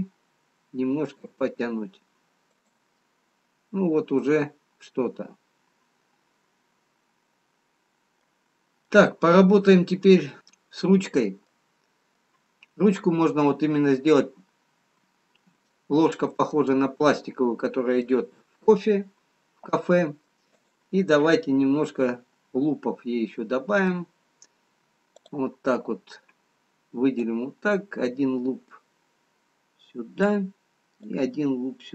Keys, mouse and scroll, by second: 0.0 g, 3.1 middle click, 8.6-8.9 scroll down 2, 10.1 middle click, 10.1-10.4 scroll down 1, 14.4 middle click, 14.4-15.7 scroll up 2, 15.7 shift+middle click, 15.7-16.9 scroll down 1, 16.9 middle click, 18.4 middle click, 18.4-19.3 scroll up 2, 21.0 click, 22.3 middle click, 27.6 click, 31.1 click.